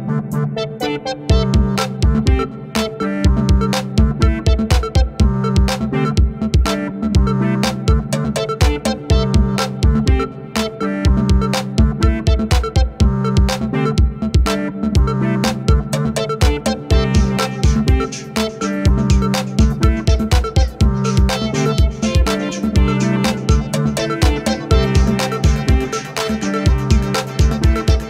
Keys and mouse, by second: 4.1 alt+click, 5.8 alt+click, 8.4 alt+click, 10.0 alt+click, 10.6 alt+click, 11.2 alt+click, 11.7 alt+click, 12.5 alt+click, 13.5 alt+click, 14.4 double click, 15.1 ctrl+z, 15.2 ctrl+z, 15.4 ctrl+z, 15.7 ctrl+z, 15.9 alt+click, 16.2 double click, 16.7 alt+click, 18.2 ctrl+=, 18.5 space, 20.5 ], 20.7 ], 22.7 space, 25.1 double click, 27.5 [, 27.8 [, 27.9 [.